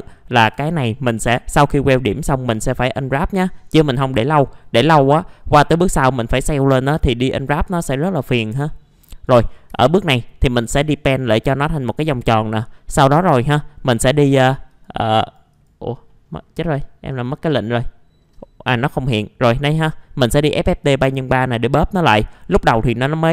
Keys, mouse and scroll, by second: 0.4 F4, 2.8 middle click, 3.2-3.6 scroll down 1, 3.6 middle click, 5.5 scroll down 1, 5.9 middle click, 6.2-6.6 scroll down 1, 8.5-9.2 scroll up 1, 9.2 click, 9.7 F4, 10.2 middle click, 12.4-13.0 scroll down 1, 13.0 middle click, 13.5-13.8 scroll up 1, 13.8 click, 16.1 middle click, 16.2-16.6 scroll down 1, 17.1-18.1 drag, 18.2 middle click, 18.8 scroll up 1, 19.1 middle click, 21.0-21.4 scroll down 1, 21.4 middle click, 22.2 click.